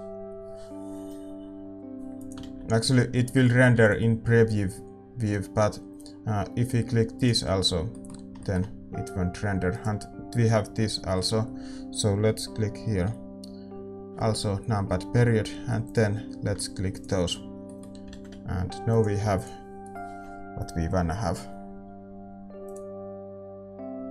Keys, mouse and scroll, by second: 2.6-9.7 drag, 3.0-7.1 middle drag, 3.0 shift+z, 7.1 ctrl+s, 7.6-15.8 middle drag, 9.7-15.8 right drag, 15.8-24.1 drag, 15.8 KP_Decimal, 17.6-20.8 middle drag, 19.5 ctrl+s, 19.5 shift+z.